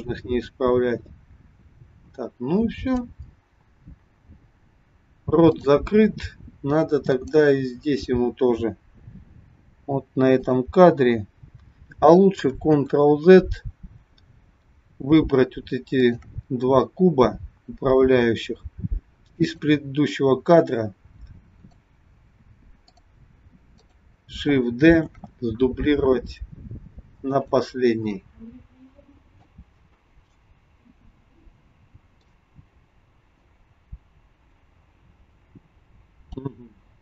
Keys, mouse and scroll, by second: 3.8-5.6 scroll up 2, 5.6 click, 7.0 click, 9.2 g, 12.8 ctrl+z, 15.9 shift+click, 19.4 click, 21.5 click, 22.8 click, 23.7 click, 25.1 shift+d, 29.5 click.